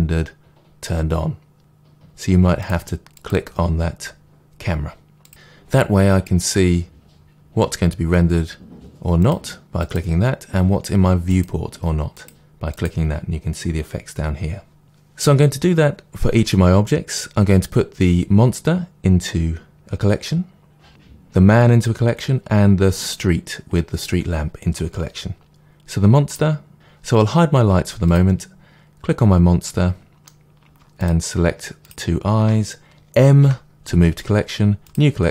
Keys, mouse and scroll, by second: 9.2 click, 9.8 click, 12.1 click, 12.7 click, 25.5-26.3 scroll up 2, 26.7 click, 29.6-30.9 middle drag, 30.9 shift+click, 31.8-33.4 shift+drag, 33.4 m.